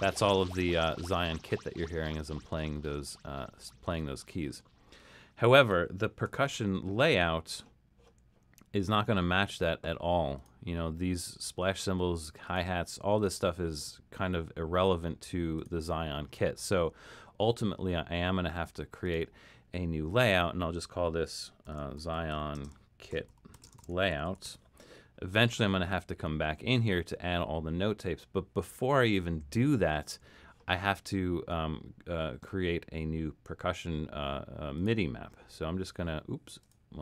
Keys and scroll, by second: 6.5 super+k, 21.4-25.0 typing.